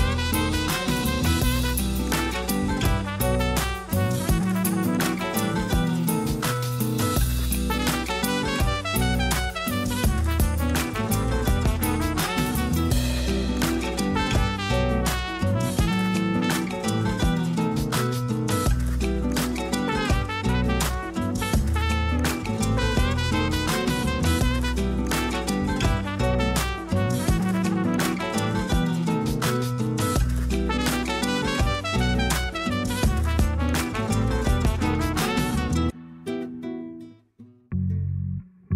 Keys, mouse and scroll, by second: 1.3 click, 6.7 click, 8.0-14.1 drag, 18.1 click, 19.7 click, 21.8 click, 22.8 click, 24.8-25.7 drag, 25.7-27.0 scroll up 10, 27.0 click, 32.0 click, 33.1 click, 33.9-35.4 middle drag, 35.4-37.4 drag, 37.4 middle click, 37.7-38.4 scroll up 1, 38.4 click.